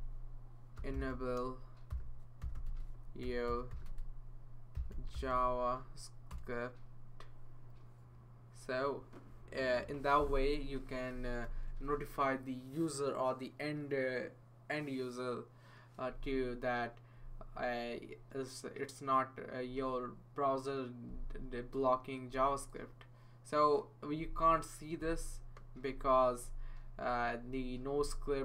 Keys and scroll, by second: 0.0-5.8 typing, 6.3 Return, 11.4 shift+1.